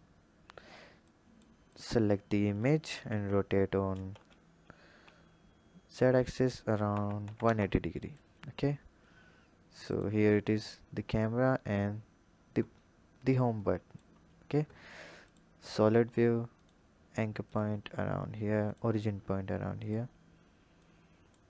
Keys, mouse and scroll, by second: 1.1-1.8 drag, 2.9 r, 9.9 click, 13.6 click, 14.2-15.3 scroll up 5, 15.3 click, 16.5-17.5 drag, 18.6-19.9 drag, 20.8 click.